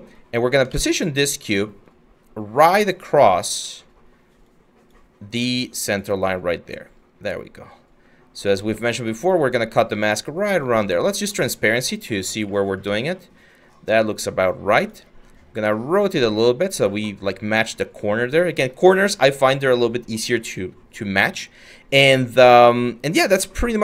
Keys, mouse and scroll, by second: 0.3 ctrl+z.